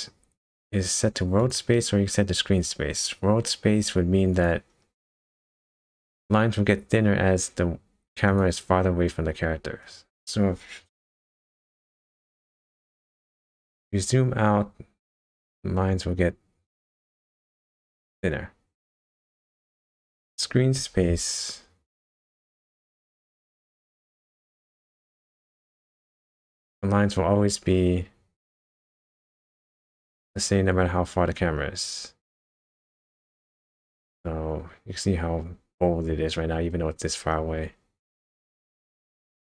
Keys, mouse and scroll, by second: 1.4 click, 4.3 click, 4.8 scroll down 1, 5.7 scroll down 3, 6.5 scroll up 1, 8.3 click, 9.0-9.5 scroll down 3, 9.8-10.3 scroll down 1, 10.3-11.3 scroll up 1, 12.3 scroll down 1, 12.6 KP_0, 13.9-16.9 scroll down 11, 16.9 middle click, 19.6-21.9 scroll up 8, 21.9 KP_0, 23.0 click, 24.3 click, 28.9 click, 30.9 KP_0, 31.6-32.6 scroll down 6, 32.6-33.1 scroll down 2, 33.5-33.9 scroll down 3, 36.7-37.1 scroll down 2, 37.1-39.0 scroll up 4, 39.0 click.